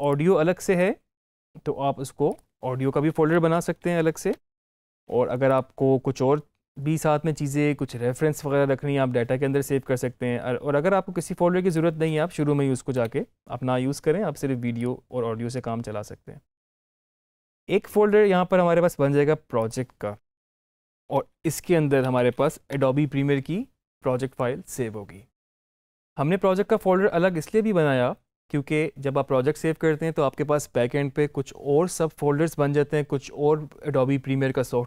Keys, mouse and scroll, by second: 2.1 click, 3.0-3.7 typing, 4.2 Return, 5.4 click, 11.0 click, 16.7 right click, 19.4 click, 20.5-22.1 typing, 22.6 Return.